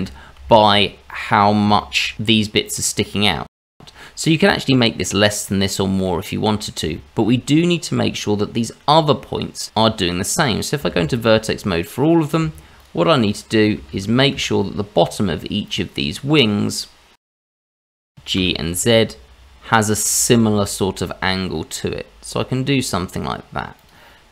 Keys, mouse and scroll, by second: 0.0 ctrl+z, 0.5-0.9 scroll down 2, 1.0 shift+middle click, 1.9-2.5 scroll up 2, 2.6 middle click, 3.1 middle click, 3.8-4.4 scroll up 2, 5.6-6.0 scroll up 1, 6.0 middle click, 6.9 shift+middle click, 7.5 middle click, 9.7 Tab, 10.7 shift+z, 11.7 click, 12.2 shift+click, 12.6 shift+middle click, 13.1 shift+z, 13.4 shift+z, 14.0 shift+click, 14.5 shift+click, 15.3 shift+click, 15.7 shift+click, 16.8 shift+click, 17.6 shift+click, 17.8 shift+z, 18.1 g.